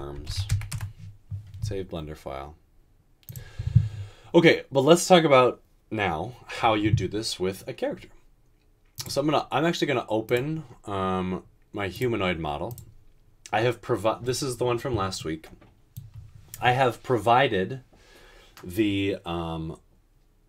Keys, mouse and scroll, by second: 0.0-1.2 typing, 0.7 Return.